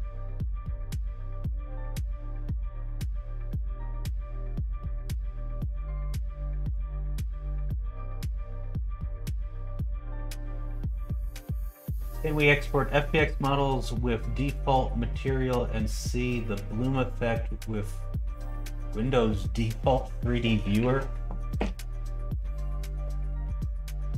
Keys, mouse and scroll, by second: 5.0 click, 5.7-7.6 drag, 9.9 middle click, 10.2 shift+middle click.